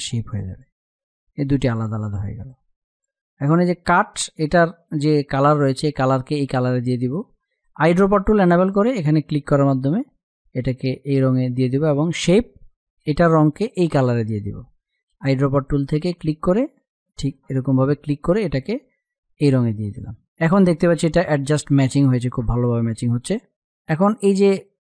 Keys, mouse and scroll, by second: 3.8 space, 4.2 click, 4.3 space, 7.2 click, 14.6 click, 18.3 space, 18.4 click, 18.8 space, 19.5-21.3 drag.